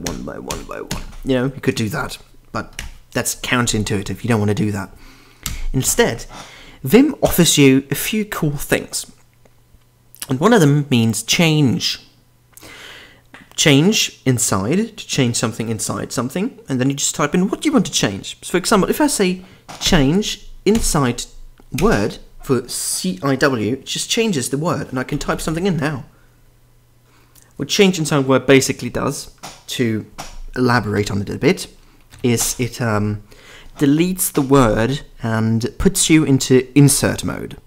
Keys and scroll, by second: 0.0-0.5 typing, 2.7 Escape, 3.0 u, 5.4 b, 19.8 typing, 21.5 typing, 24.9-26.0 typing, 31.0 typing, 32.0 Escape, 32.1 b.